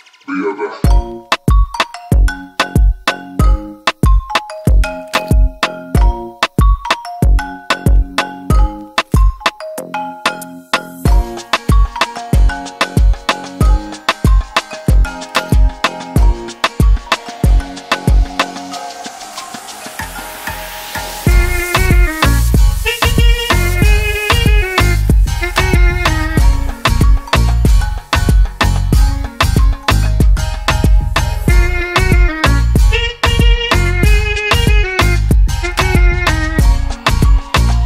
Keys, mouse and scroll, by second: 2.9 click, 4.6 click, 10.0 click, 14.2 right click, 16.7 click, 17.8 right click, 19.3 click, 21.3 click, 22.8 click, 30.2 click, 31.8 click, 33.4 click.